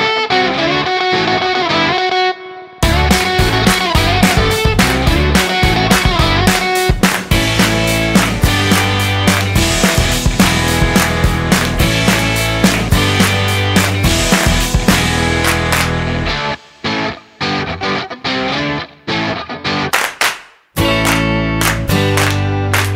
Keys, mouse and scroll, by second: 2.5 shift+a, 8.1 click, 10.4 middle click, 11.5 click, 12.9 middle click, 13.7 click, 14.8 middle click, 15.9 click.